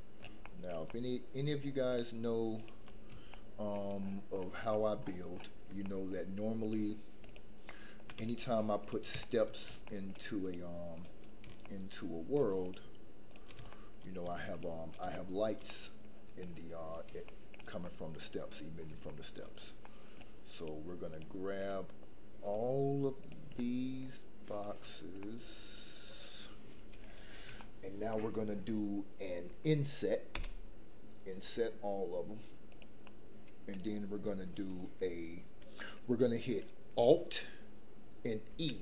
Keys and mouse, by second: 0.4 shift+middle click, 0.8 middle click, 1.8 shift+click, 2.5 shift+click, 3.3 shift+middle click, 5.8 shift+middle click, 7.6 shift+middle click, 8.2 shift+click, 8.8 shift+click, 9.2 shift+middle click, 9.8 shift+middle click, 10.8 shift+click, 11.6 shift+middle click, 13.7 shift+middle click, 14.5 shift+click, 15.1 shift+middle click, 15.6 middle click, 17.2 shift+middle click, 17.8 middle click, 19.0 shift+middle click, 19.8 middle click, 21.1 shift+click, 21.6 shift+click, 23.5 shift+middle click, 25.2-27.0 middle drag, 27.6 shift+middle click, 30.3 i, 33.0 middle click, 38.5 alt+e.